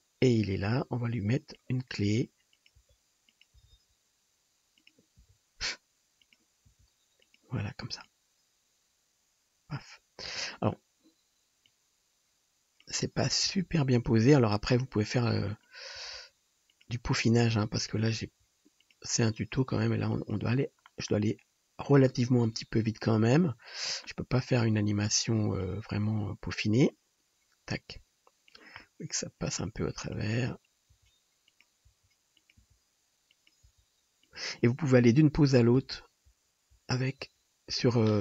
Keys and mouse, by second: 2.2 r, 2.9-8.1 drag, 2.9 g, 3.6 r, 5.3 r, 6.8 g, 13.5 g, 14.1-23.1 drag, 14.2 r, 16.0 r, 18.4 r, 19.5 r, 24.4 click, 25.6-28.9 drag, 28.9-30.2 middle drag, 30.2-33.7 drag, 30.9 g, 31.9 r, 32.7 g, 33.7 r, 35.8 Right, 36.3 Left, 36.8 Left, 37.3 Left, 37.8 Left.